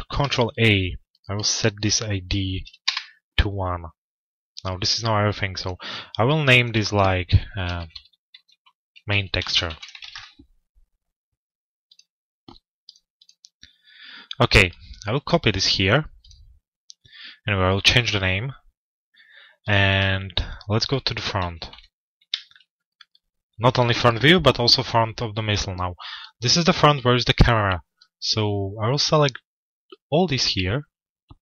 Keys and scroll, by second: 2.8 Return, 9.6 Return, 21.0 f, 21.6 z.